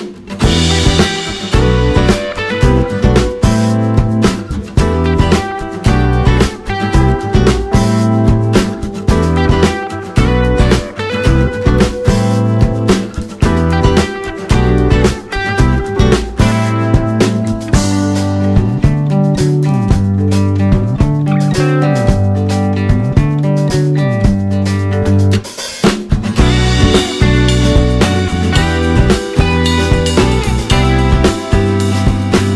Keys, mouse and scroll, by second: 0.6 click, 1.1 alt+click, 1.2 click, 3.0 click, 3.5 click, 3.8 alt+click, 3.9 click, 4.4 click, 4.5 click, 4.9 click, 5.5 click, 5.7 click, 6.9 click, 9.1 click, 10.0 click, 12.4 click, 13.8 click, 14.3 click, 15.3-17.5 drag, 18.3 ctrl+z, 18.7 click, 19.1-22.0 drag, 22.5 click, 23.0-28.6 drag, 28.9 click, 29.5-32.5 drag.